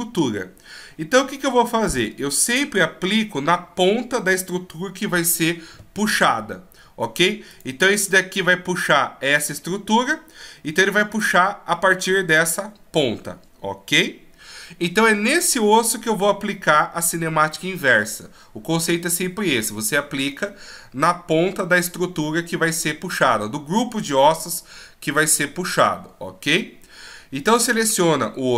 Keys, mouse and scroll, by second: 7.5 right click, 11.1 right click.